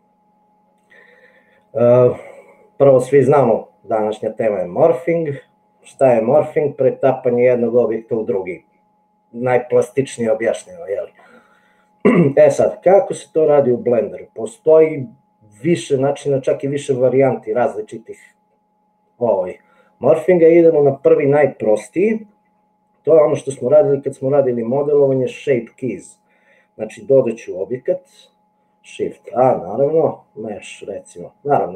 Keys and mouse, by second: 29.4 shift+a.